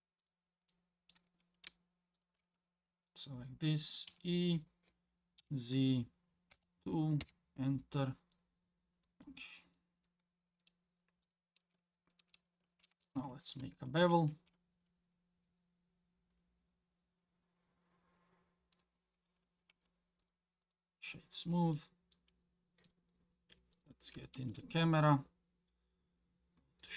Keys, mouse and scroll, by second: 0.2 click, 0.7 middle click, 2.2 shift+click, 2.5 scroll down 2, 4.1 e, 7.7 scroll down 2, 8.3 middle click, 9.2 alt+click, 9.2 e, 9.8 middle click, 10.3-10.8 scroll up 3, 11.2 click, 13.1 alt+click, 14.0 ctrl+b, 19.7 Tab, 20.2 click, 20.6 click, 20.6 right click, 21.7-22.1 middle drag, 22.8 click, 23.3-23.7 scroll down 1, 23.7 click, 24.4 shift+a.